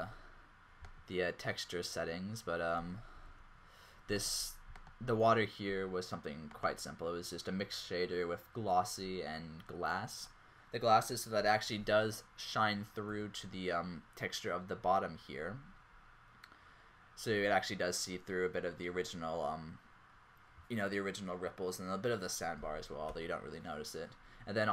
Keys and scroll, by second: 2.8 z, 13.1 g, 23.2 ⟲.